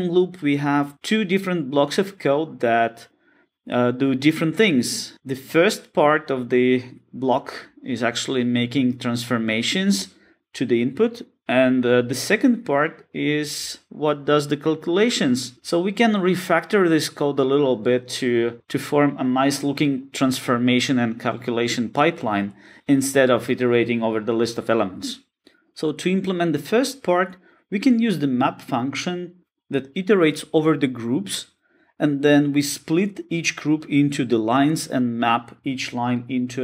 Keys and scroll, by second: 28.8 Return, 32.1 Return.